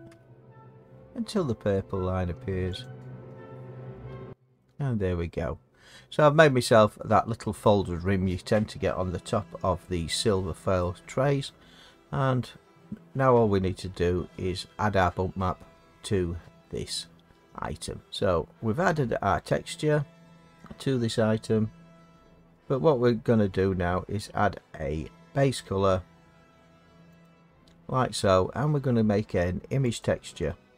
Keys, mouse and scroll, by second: 0.1 z, 2.8 click, 4.1 Tab, 7.1 middle click, 13.1 middle click, 19.4-24.6 middle drag, 24.6-26.0 scroll, 26.0-27.2 scroll, 27.2 click, 30.0 click.